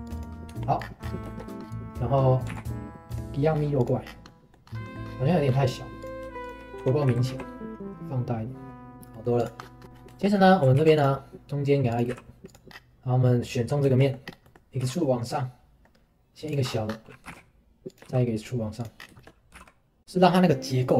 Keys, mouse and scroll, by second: 0.5 Tab, 0.8-1.2 scroll down 10, 1.3-1.6 shift+middle drag, 1.6-1.9 scroll up 2, 2.5 scroll up 1, 2.5 alt+x, 3.1 click, 3.5-4.2 scroll down 2, 3.8 click, 4.2-4.6 middle drag, 4.6-6.0 scroll up 5, 4.8 middle click, 5.3 middle drag, 6.0 click, 6.4 shift+click, 6.8 Tab, 7.1 a, 8.9 middle click, 9.1 right drag, 9.4 click, 9.6 scroll down 1, 9.8-10.1 scroll up 3, 9.8 Tab, 10.1 right click, 10.1 shift+middle click, 10.4 scroll up 1, 10.8 ctrl+r, 12.1 3, 12.5 click, 12.7-13.1 scroll down 2, 13.4 click, 13.9 shift+middle click, 14.2 scroll down 1, 14.4 middle click, 14.8 e, 16.7-17.2 scroll up 3, 17.2 g, 19.0 scroll down 1, 19.2 shift+middle click, 19.5 g.